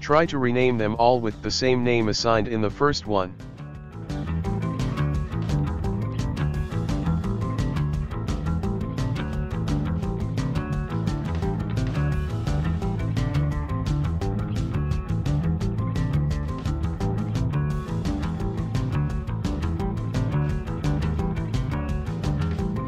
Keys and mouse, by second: 0.3 click, 0.8 right click, 1.5-2.1 right drag, 2.3 click, 3.2-3.5 shift+middle drag, 3.5 right click, 3.8 click, 4.6 shift+middle click, 5.0 right click, 5.4 click, 6.5 right click, 7.1 click, 8.0 right click, 8.2 right click, 8.5-9.0 ctrl+middle drag, 9.0 right click, 9.4 click, 10.3-11.7 ctrl+shift+middle drag, 11.7 right click, 12.4-12.9 drag, 13.3-14.1 ctrl+middle drag, 14.1 right click, 14.4-15.5 drag, 15.9 a, 16.0 a, 16.3-17.6 shift+middle drag, 17.7-18.2 shift+right drag, 18.6-19.3 right drag, 19.8-20.4 right drag, 20.5 right click, 21.2 right click.